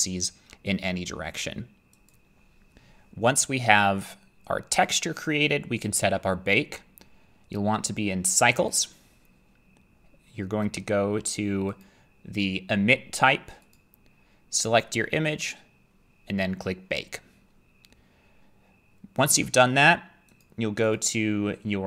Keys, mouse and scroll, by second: 2.1 click, 4.8 click, 8.8 click, 11.5 click, 13.7 click, 20.4 click, 21.0 click.